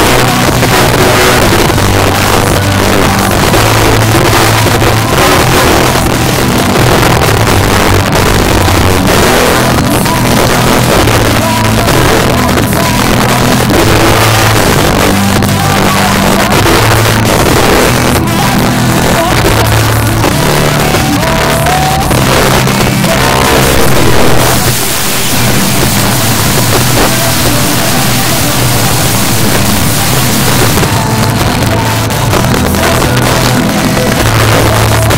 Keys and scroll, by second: 30.8 Page_Down.